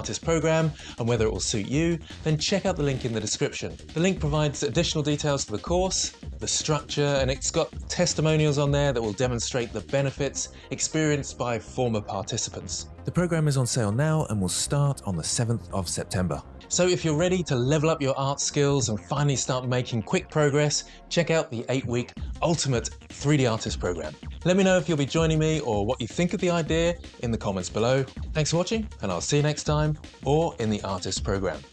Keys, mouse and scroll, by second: 23.6 Tab, 27.1 shift+d, 27.7 x, 29.1 x, 29.3 x, 29.3 g, 31.1 Tab.